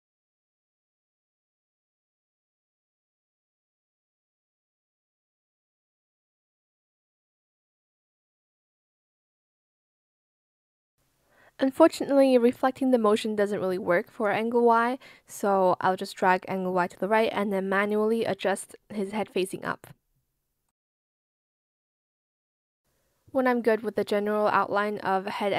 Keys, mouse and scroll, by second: 0.1 ctrl+z, 0.7 ctrl+shift+z, 2.0 shift+click, 2.9 shift+click, 4.9 shift+click, 5.5 shift+click, 6.1 shift+click, 7.8 shift+click, 8.5 shift+click, 9.1 shift+click, 10.8 shift+click, 13.4 shift+click, 13.9 shift+click, 14.4 shift+click, 15.0 shift+click, 17.4 shift+click, 17.9 shift+click, 18.5 shift+click, 19.6 ctrl+z, 20.1 shift+click, 20.7 shift+click, 21.5 shift+click, 22.0 shift+click, 22.6 shift+click, 22.8 ctrl+z, 23.3 ctrl+z, 23.5 shift+click, 24.1 shift+click, 24.3 shift+click, 24.9 shift+click, 25.2 ctrl+z, 25.5 shift+click.